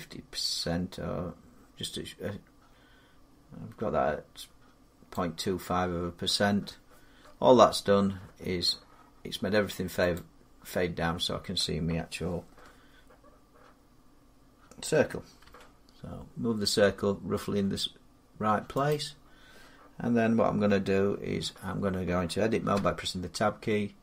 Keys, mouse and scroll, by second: 4.9 click, 9.9 click, 15.2 g, 18.7 click, 22.5 Tab.